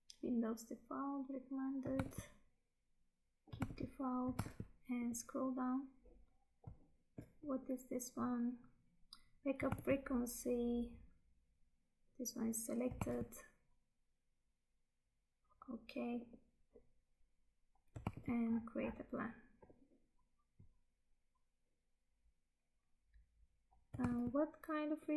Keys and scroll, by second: 2.1 Tab, 3.7 Tab, 9.8 Tab, 13.1 Tab, 18.1 Tab, 24.1 Tab.